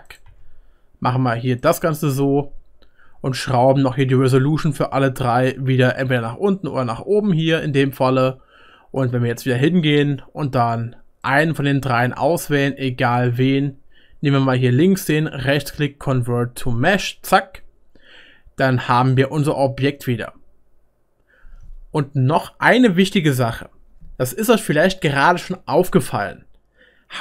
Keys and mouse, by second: 0.2 s, 4.2-5.5 middle drag, 4.4-5.5 drag, 11.3-12.6 drag, 12.6-27.2 right drag.